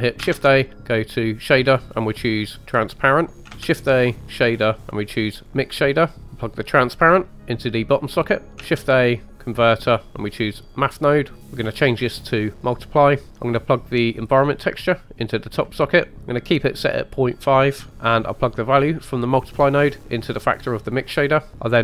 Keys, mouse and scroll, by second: 0.4 shift+a, 3.5 shift+a, 6.1 click, 6.9 drag, 8.4 middle click, 8.6 shift+a, 11.6-12.7 drag, 14.5 drag, 17.9 ctrl+z, 17.9 ctrl+a, 19.4 drag, 21.5 ctrl+z.